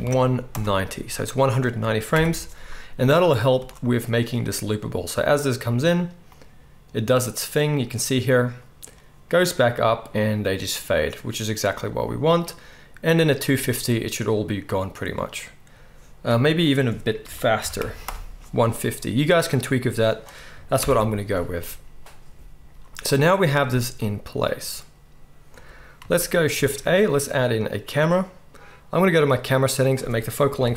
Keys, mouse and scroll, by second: 2.2 shift+Left, 3.5 space, 16.2 space, 20.8 shift+Left, 26.5 shift+a, 27.0-28.1 drag, 27.0-29.2 middle drag, 27.0-28.1 right drag, 29.2 right click, 29.8-30.7 middle drag.